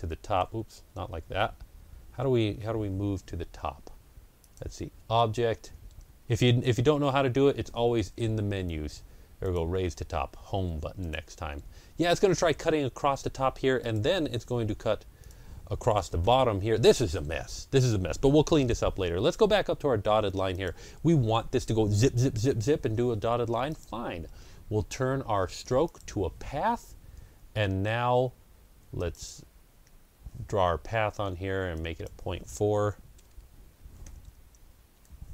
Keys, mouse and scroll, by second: 0.7 ctrl+z, 4.3 click, 9.3 ctrl+z, 9.3 click, 10.9 click, 13.7 click, 16.1 Home, 19.4 scroll up 1, 20.4 click, 23.6 click, 23.6-25.0 scroll up 1, 25.7 click, 31.6 shift+click, 33.0 BackSpace, 33.7 Delete, 33.7 KP_Decimal, 33.9 KP_4, 34.8 KP_Enter.